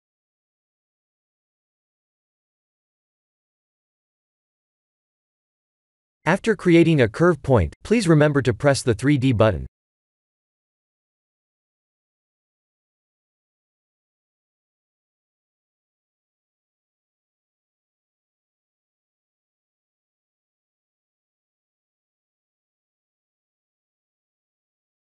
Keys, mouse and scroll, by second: 1.8-2.6 scroll up 10, 2.8 click, 3.3 shift+a, 12.6 KP_3, 13.0 KP_1, 14.1 KP_Decimal, 16.9 click, 18.3 click, 18.7-19.3 scroll down 9, 20.7 Tab, 20.7-21.1 scroll down 3, 21.8 g.